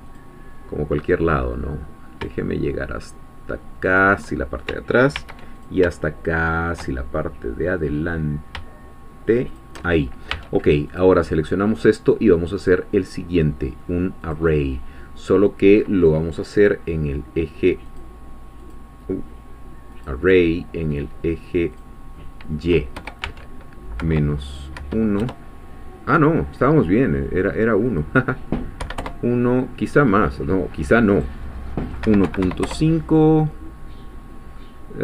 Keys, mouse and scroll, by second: 0.1 ctrl+click, 3.9 shift+click, 5.1 ctrl+r, 5.6 ctrl+click, 9.5 shift+click, 10.3 Tab, 10.9 click, 12.6-13.9 drag, 14.3 click, 17.9 click, 18.7 click, 19.9 click, 21.7 click, 22.9 0, 24.0 -, 24.7 1, 25.2 Return, 27.9 click, 28.8 1, 29.0 Return, 31.2 click, 32.0 1, 32.3 ., 32.4 5, 32.6 Return, 34.6-35.0 middle drag.